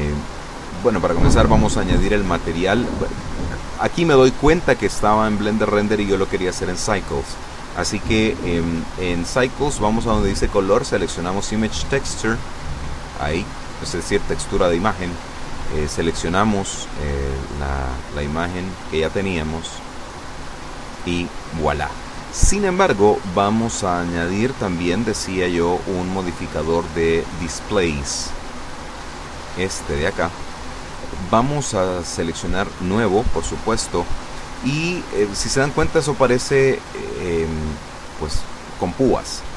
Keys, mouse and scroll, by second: 0.3 click, 2.1 click, 2.9 click, 6.3 click, 9.9 click, 14.6 click, 16.3 click, 20.0 click, 26.0 click, 27.2 click, 29.6 click, 32.9 click.